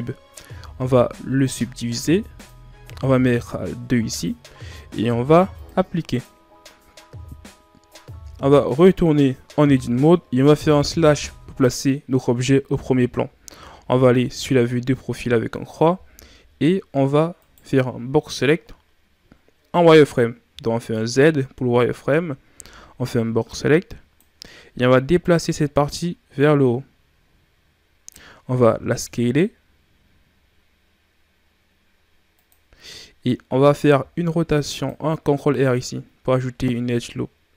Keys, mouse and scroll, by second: 2.4-8.5 drag, 8.7 Tab, 11.0 KP_Divide, 13.8 KP_3, 16.1-17.3 scroll down 5, 17.3 right click, 20.4 z, 22.4 b, 25.1-28.2 drag, 28.8 s, 33.9 ctrl+r.